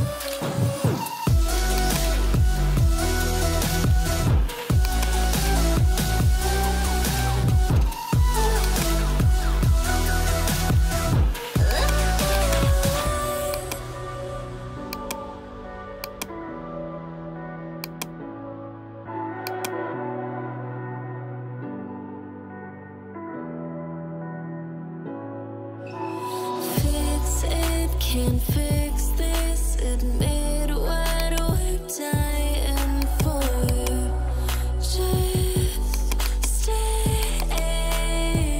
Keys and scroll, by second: 1.3 ], 29.5 [, 30.7 ], 32.6 ].